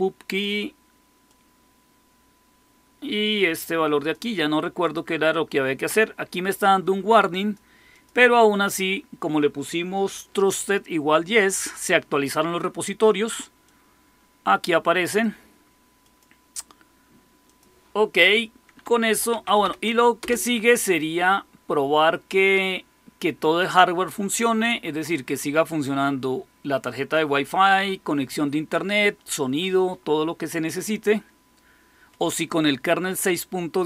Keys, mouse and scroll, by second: 1.2-4.0 drag, 4.7 click, 6.7 click, 7.8 click, 13.6-15.1 drag, 15.9 click, 17.4 click, 18.7-20.0 typing, 20.1 Return.